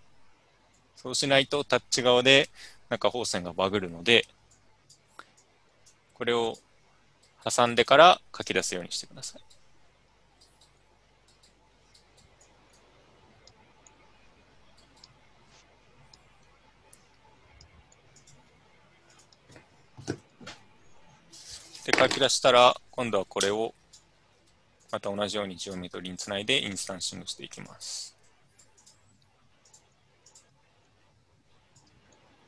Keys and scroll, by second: 23.4 Tab, 24.3 typing.